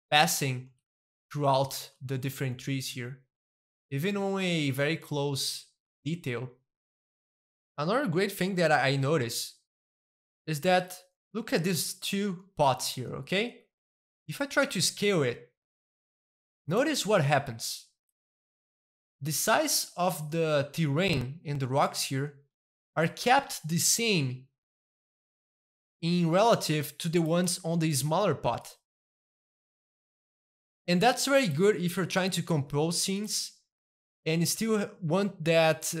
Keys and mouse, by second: 0.3-4.5 shift+middle drag, 4.7-7.1 middle drag, 9.8 middle click, 10.8-12.2 shift+middle drag, 12.2-14.5 shift+middle drag, 14.5 s, 17.3-18.3 middle drag, 18.5-20.2 shift+middle drag, 20.4-22.4 shift+middle drag, 22.5 shift+middle click, 23.0 s, 25.3 middle click, 26.1-27.5 shift+middle drag, 27.5 click, 27.6 s, 28.5 click, 29.0-30.2 middle drag, 30.2 click, 30.4 middle click, 30.8 g, 31.3-32.4 middle drag, 31.6 click, 32.4 g, 33.0 click, 33.2 middle click, 34.0-36.0 shift+middle drag.